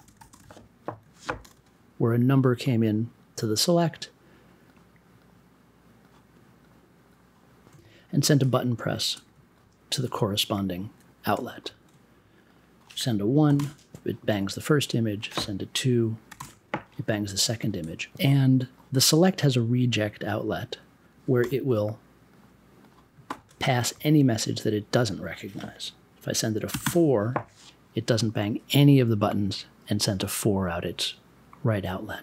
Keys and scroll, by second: 3.2 b, 13.4 1, 13.5 Return, 16.3 2, 16.3 Return, 21.4 m, 26.7 4, 26.8 Return.